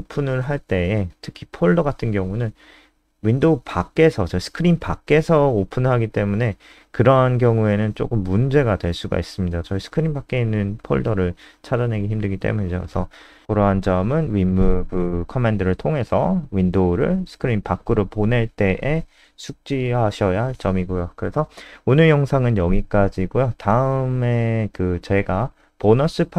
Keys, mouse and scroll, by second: 10.1 alt+super+Up, 10.2 alt+super+Up, 10.3 alt+super+Up, 10.5 alt+super+Up, 11.7 click, 20.2 scroll down 2, 21.6 click, 22.3-23.0 scroll down 2, 23.0-23.8 scroll up 3, 23.8-24.9 scroll up 2.